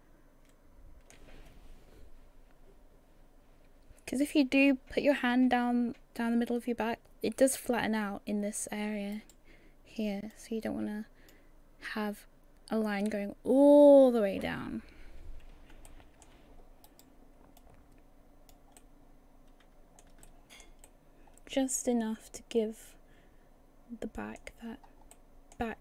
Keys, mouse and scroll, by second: 9.2 right click, 10.3 click, 15.9 shift+middle click, 16.9 right click, 17.6 click, 18.8 middle click, 20.2 shift+middle click, 20.8 middle click, 24.7-25.1 scroll up 1.